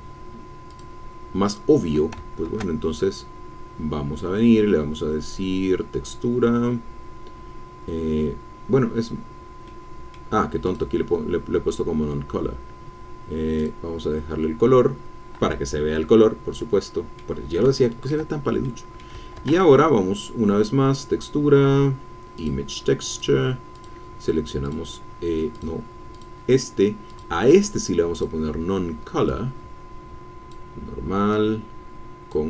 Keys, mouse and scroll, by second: 0.7 click, 1.5 click, 2.4 shift+a, 9.7-10.0 scroll down 2, 10.6 click, 13.6 click, 15.9-18.6 drag, 18.6 click, 19.4 shift+a, 19.9 shift+Caps_Lock, 22.4-23.5 drag, 23.7 click, 24.7 click, 25.5 click, 26.1 click, 27.1 click, 28.1 click, 29.3-30.7 drag, 31.3-32.4 drag.